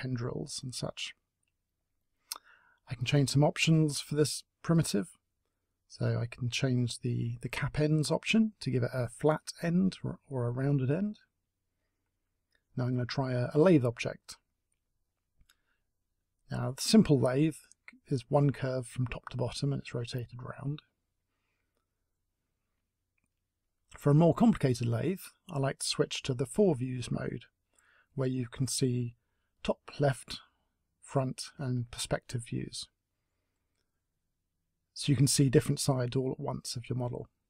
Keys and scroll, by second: 10.8 Delete, 14.6 t, 19.7 Delete.